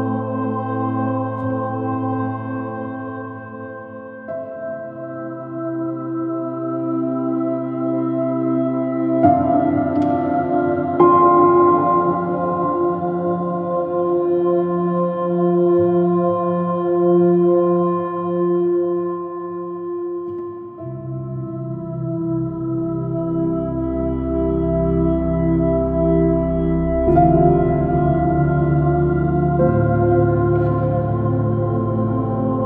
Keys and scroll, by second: 1.1 j, 7.3 space, 10.3 m, 10.9 space, 11.1 space, 16.0 Return, 18.5 x, 21.8 x, 23.0 x, 28.5 x.